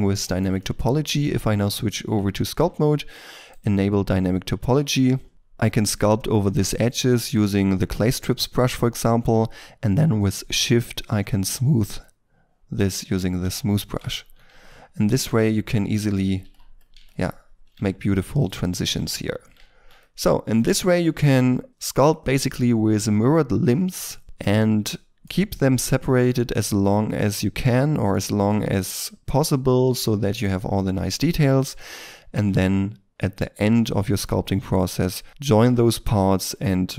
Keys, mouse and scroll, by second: 0.2 shift+middle click, 0.5 shift+middle click, 1.5 Tab, 5.3 f, 6.8 f, 11.8 shift+click, 13.2 ctrl+middle click, 13.5 ctrl+middle click, 14.1 ctrl+click, 14.6 shift+click, 15.3 middle click, 15.8 shift+middle click, 16.3 f, 16.7 double click, 17.0 shift+click, 17.8 middle click, 18.3 shift+click, 19.1 shift+click, 19.5 ctrl+middle click, 19.9 shift+middle click, 20.6 Tab, 24.2 middle click, 25.5-26.0 scroll up 1, 26.0 middle click, 31.7 middle click, 35.3 middle click.